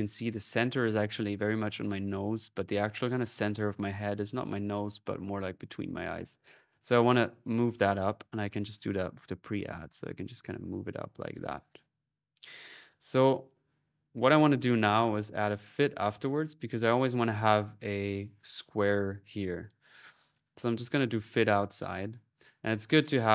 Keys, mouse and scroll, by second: 6.6 click, 7.5-11.6 drag, 12.3 click, 13.1 click, 14.0 right click, 14.3-15.1 typing, 15.6 click, 16.1 click, 16.6 middle click, 19.8 click, 20.7-22.1 drag, 22.8 click.